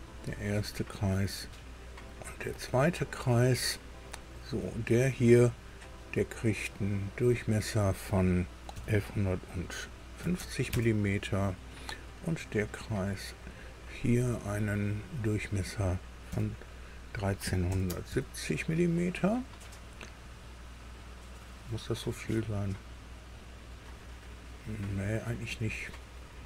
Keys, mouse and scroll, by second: 0.6 click, 1.9 click, 2.9 click, 3.4 right click, 4.9 click, 7.1 click, 8.7 KP_1, 8.9 KP_1, 10.2 KP_5, 10.4 KP_0, 10.7 KP_Enter, 13.4 click, 15.1 click, 16.3 KP_1, 17.4 KP_3, 17.7 KP_7, 18.1 KP_0, 18.1 KP_Enter, 19.9-20.5 scroll up 4, 23.3 scroll down 2, 23.9 scroll up 2.